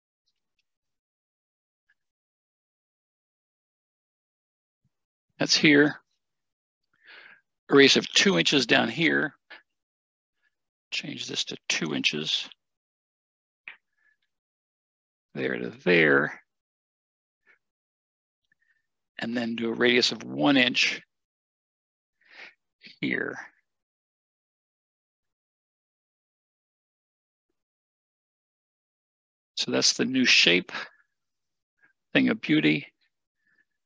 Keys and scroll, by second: 12.3 2, 21.8 1, 28.2 Escape.